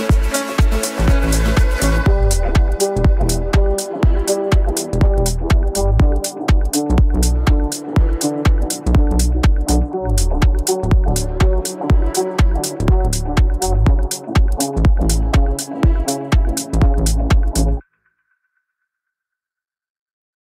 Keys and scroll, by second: 8.5 Delete.